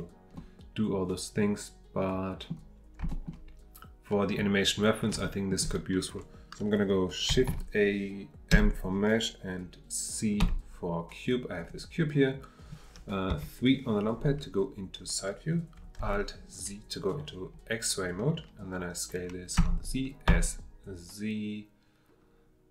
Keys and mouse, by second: 0.3-2.5 middle drag, 3.1 shift+middle drag, 5.2 shift+middle drag, 7.5 shift+a, 13.3 KP_3, 16.0 alt+z.